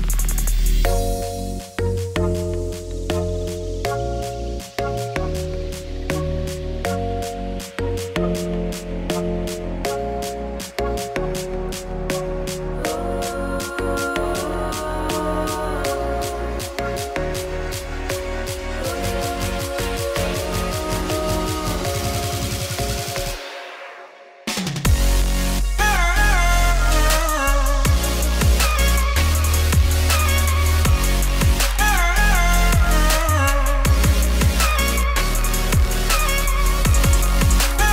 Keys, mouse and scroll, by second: 0.6 shift+click, 7.3 Tab, 8.5 shift+middle click, 9.1 2, 14.5 click, 15.0 click, 15.3 click, 15.5 middle click, 15.9-17.2 drag, 17.2 middle click, 17.6 e, 19.2 Tab, 24.0-25.2 drag, 25.6 click, 26.2 s, 27.3 click, 30.1 shift+middle click, 30.3 click, 31.6 middle click, 31.9 g, 33.6 middle click, 33.6 scroll down 1, 33.8 middle click, 34.6 Tab, 35.4-36.7 scroll down 4.